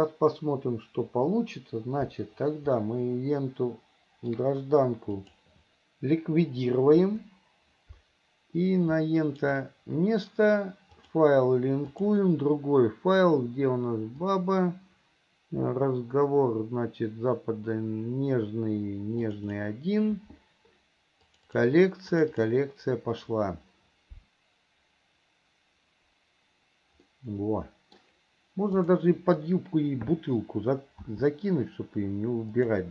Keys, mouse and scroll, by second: 3.1-4.7 middle drag, 5.4 click, 9.6 shift+right click, 11.2-12.9 drag, 27.3-28.4 middle drag, 29.1 click, 31.3 s.